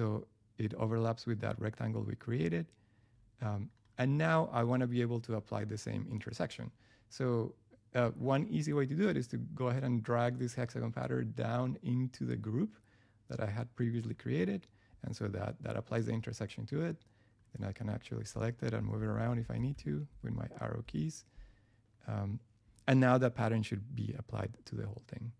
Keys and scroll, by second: 18.8 Left, 20.8 Up.